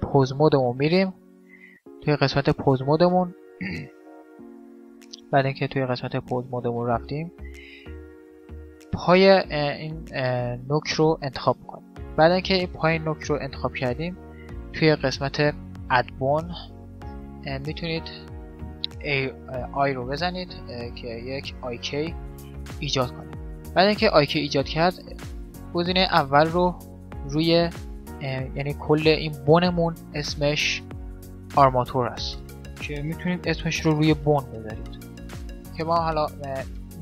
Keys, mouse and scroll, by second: 1.0-8.6 middle drag, 8.2-11.2 right drag, 13.4-15.2 drag, 25.8-27.6 drag, 30.9-32.6 drag.